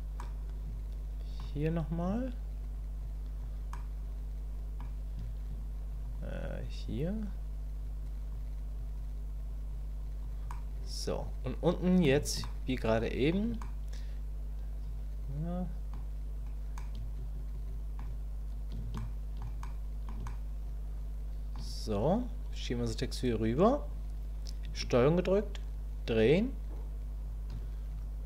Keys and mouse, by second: 0.2-1.4 middle drag, 1.4 click, 2.2 click, 3.0 click, 3.7-4.8 middle drag, 6.1 click, 7.0 click, 8.0 click, 8.8 click, 9.5 click, 10.0 click, 10.5-12.0 middle drag, 12.4 shift+middle click, 13.6-15.9 drag, 16.8-18.0 drag, 19.0 shift+click, 19.6 click, 20.3-21.5 shift+drag, 22.4-23.9 drag, 25.1-27.6 ctrl+drag.